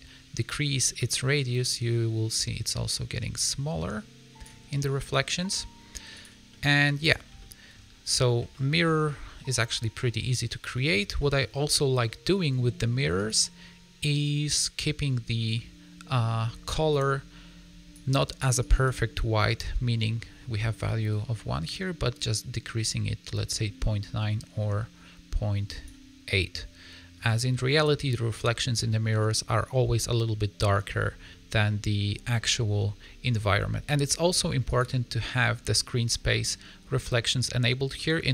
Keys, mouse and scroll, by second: 0.9 click, 5.1 middle click, 5.5-6.1 scroll up 3, 6.1 click, 6.4 middle click, 7.3 shift+middle click, 8.0 scroll up 4, 8.4 shift+middle click, 9.0 middle click, 10.8 scroll down 2, 11.1 middle click, 13.1 click, 26.2 middle click, 28.7 middle click, 31.0 scroll down 5, 31.2 middle click, 32.3-32.7 scroll up 3, 32.7 scroll down 1, 32.9 middle click, 33.5-33.9 scroll up 1, 34.6 click, 37.9 middle click.